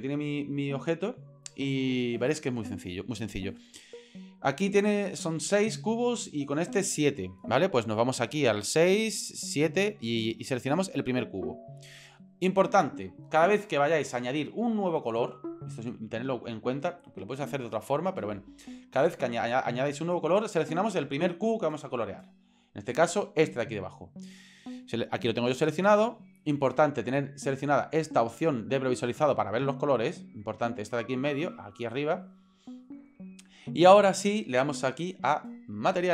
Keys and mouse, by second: 11.3 right click, 34.9 click, 35.9 click.